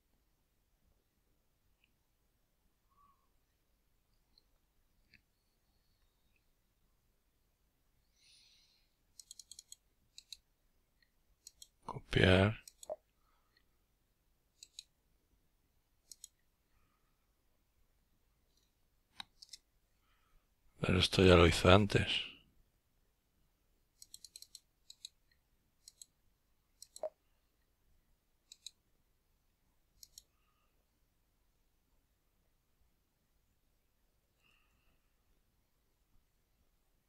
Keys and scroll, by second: 8.3 Return.